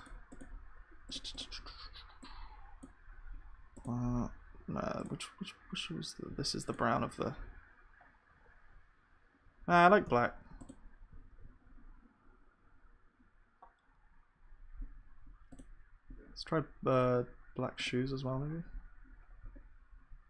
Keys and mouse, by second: 7.4-8.8 drag, 8.0 right click, 8.8-11.3 middle drag, 9.3 ctrl+z, 11.3 ctrl+s, 11.3-13.4 drag, 19.4-20.2 drag.